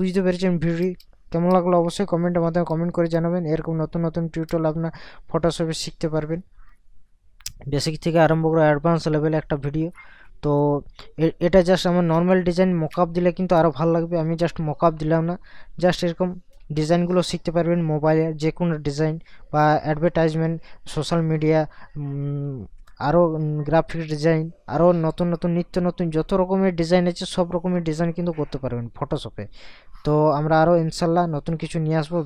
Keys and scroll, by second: 0.8 ctrl+KP_Add, 2.7 ctrl+KP_Subtract, 4.6 ctrl+KP_Add, 11.6 ctrl+KP_Subtract, 13.5 ctrl+KP_Add.